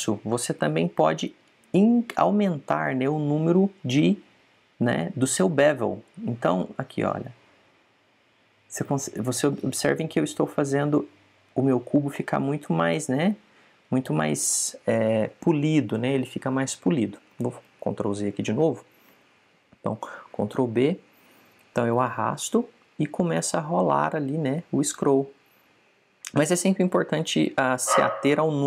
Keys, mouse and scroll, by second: 10.8 click, 12.8-15.0 middle drag, 18.5 super+z, 21.5 ctrl+b.